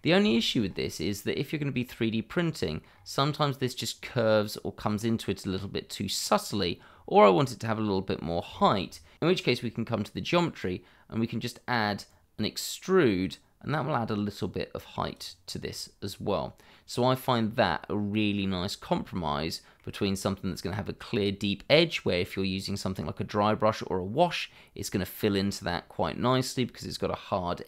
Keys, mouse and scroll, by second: 0.3 shift+middle click, 0.6 scroll up 1, 1.1 middle click, 2.9-3.3 scroll up 1, 3.3 middle click, 5.6-6.1 scroll down 1, 6.1 middle click, 6.3-7.0 scroll down 1, 7.4 middle click, 8.5 shift+middle click, 9.1 scroll up 1, 12.0 click, 15.4 scroll down 1, 15.7 middle click, 20.0 scroll up 1, 21.7 scroll down 1, 22.0 middle click, 27.1 middle click.